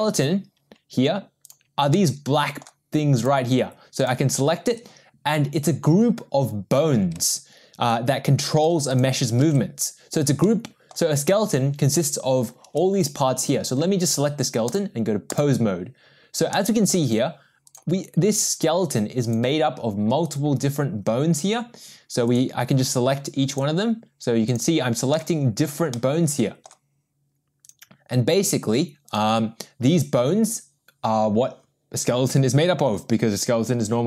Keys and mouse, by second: 1.4 click, 1.9-2.6 middle drag, 3.2 click, 4.0 click, 10.5-10.9 middle drag, 14.8-15.6 drag, 16.5-16.9 middle drag, 17.6 click, 19.3 click, 20.3 click, 22.3 click, 23.5 click, 24.5 click, 25.1-25.6 middle drag, 26.0-26.7 middle drag, 27.6 click, 29.1 click.